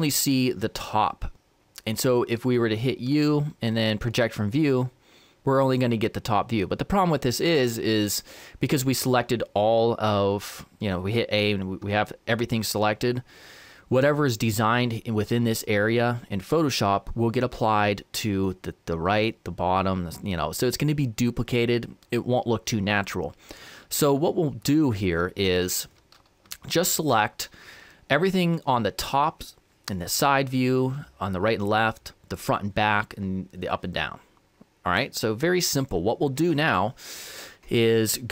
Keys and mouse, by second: 3.2 u, 24.3-28.6 middle drag.